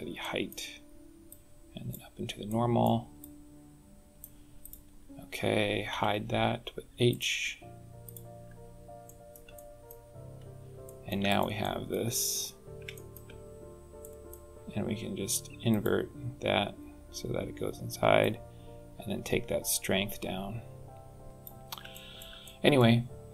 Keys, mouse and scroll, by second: 0.0 middle click, 1.1 click, 2.3 middle click, 3.0 click, 4.4 click, 5.7 h, 6.9 click, 7.9 click, 8.9 shift+middle click, 9.3 middle click, 9.9-10.3 scroll up 4, 10.6 shift+middle click, 11.1 click, 11.4 middle click, 11.9 scroll up 3, 12.7 middle click, 13.8 middle click, 15.5 click, 18.0 click, 21.3 click, 21.7 shift+middle click, 22.2 middle click.